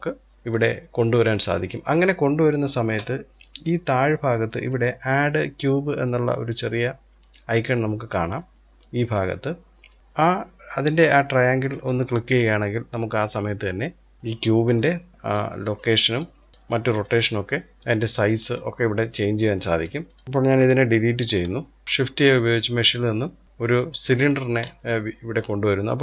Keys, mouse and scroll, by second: 9.6 click, 10.8-13.6 drag, 13.6-14.2 scroll up 1, 14.2-15.1 shift+middle drag, 15.1-19.4 drag, 20.0 click, 20.2 Delete, 21.8 shift+a, 24.1-26.0 scroll up 2.